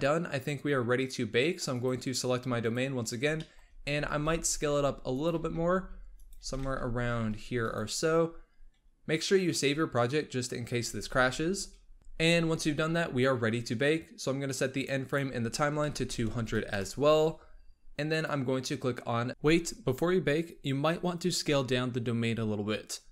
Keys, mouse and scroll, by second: 1.6 click, 2.5 click, 3.2-3.6 shift+middle drag, 3.6 shift+scroll up 1, 3.8 s, 5.2 g, 6.2 s, 10.8 ctrl+s, 14.4-16.3 drag, 16.3 KP_0, 18.0-19.3 drag.